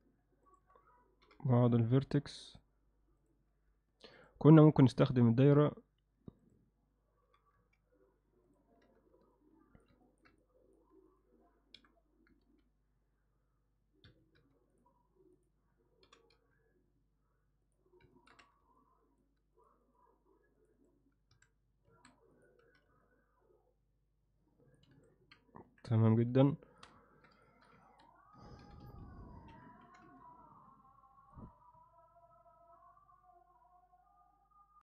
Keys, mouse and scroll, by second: 0.5 shift+click, 1.3 g, 3.2 click, 4.2 click, 7.3 g, 8.8 z, 9.3 alt+middle click, 10.1 ctrl+middle click, 10.5 alt+middle click, 11.1 click, 11.8 f, 14.4 x, 15.4 click, 16.1 g, 18.1 ctrl+alt+middle click, 18.4 z, 18.8 alt+middle click, 21.4 a, 21.9 alt+a, 22.6 z, 23.0-24.8 alt+middle drag, 25.0 a, 25.7 KP_3, 26.5 alt+shift+middle click, 27.5 shift+middle click, 27.9 ctrl+middle click, 28.6 g, 29.9 g.